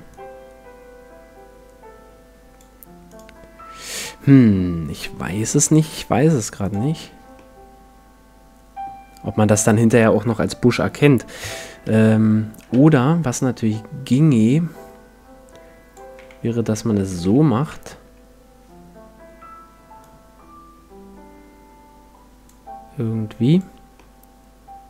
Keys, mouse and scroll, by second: 3.1-5.5 drag, 4.3-6.0 middle drag, 6.6-8.4 drag, 7.4-9.2 middle drag, 11.4 KP_1, 12.8 Tab, 13.4-15.3 drag, 16.2 a, 17.1 shift+a, 17.7 Tab, 20.0-21.8 drag, 23.5-24.8 drag, 24.0-24.8 middle drag.